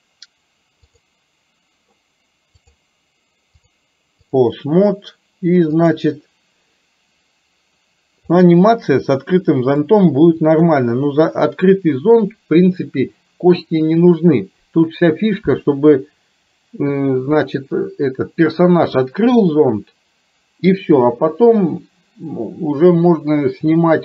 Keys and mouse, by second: 1.1 click, 2.7 click, 3.8 click, 6.2 click, 8.5-9.8 middle drag, 10.6 KP_3, 16.1-17.2 middle drag.